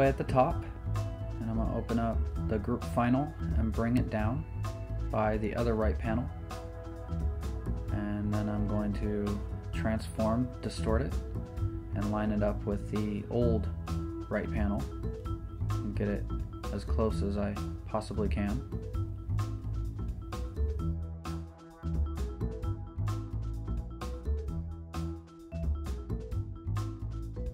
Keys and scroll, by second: 8.4 z, 15.2 super+t, 22.4 Return, 23.1 z, 23.5 super+t.